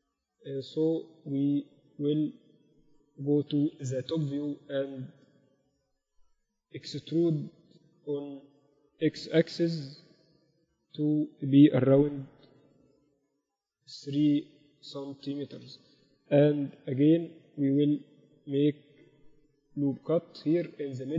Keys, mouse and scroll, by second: 0.6-2.1 middle drag, 2.1 Tab, 2.3 Tab, 3.1 KP_7, 4.7-6.9 middle drag, 6.9 Tab, 7.2 a, 7.4 a, 8.3-10.0 drag, 8.7 a, 8.8 a, 9.6 e, 10.0 right click, 16.3 KP_1, 18.4 ctrl+r.